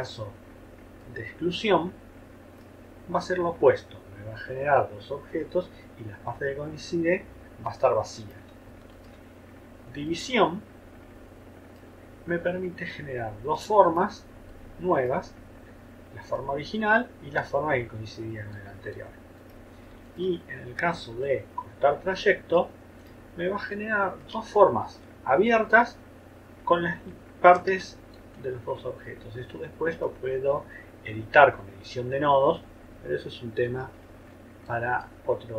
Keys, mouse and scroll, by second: 8.9 shift+click, 20.1 shift+click, 24.5-25.1 ctrl+scroll up 2, 25.4 ctrl+click, 27.4-27.7 ctrl+scroll down 1, 28.1 ctrl+click.